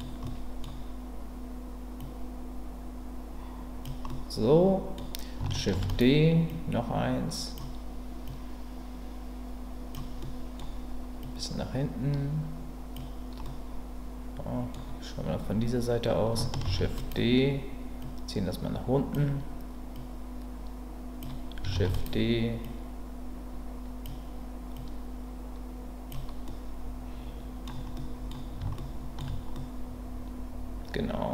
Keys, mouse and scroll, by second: 0.2 middle click, 2.0-3.8 drag, 4.1 middle click, 5.7 shift+d, 6.5-7.5 drag, 8.3-9.9 drag, 10.2 middle click, 11.2-12.9 drag, 13.4-14.7 middle drag, 16.6 shift+d, 18.0-19.1 drag, 20.0-21.2 drag, 21.7 shift+d, 22.6-24.0 drag, 24.8-26.1 drag, 26.4-27.7 middle drag, 27.9 middle click, 28.7 shift+middle click, 29.5-31.3 middle drag.